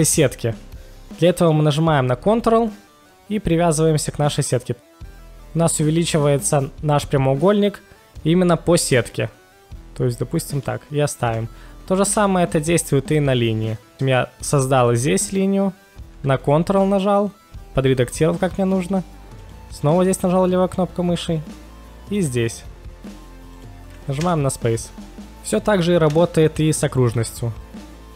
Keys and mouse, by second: 10.6-12.1 drag, 12.1 space, 19.4 ctrl+click, 22.1 ctrl+click, 23.5 ctrl+click, 24.2 space, 26.1 space, 27.1 click.